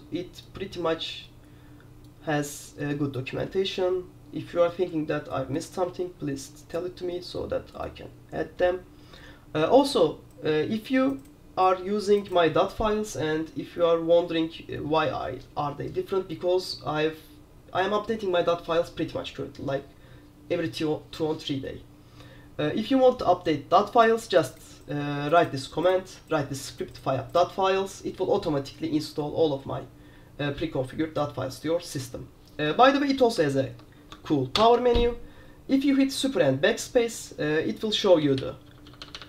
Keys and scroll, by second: 33.8 Escape, 34.6 super+BackSpace, 38.3-39.2 typing.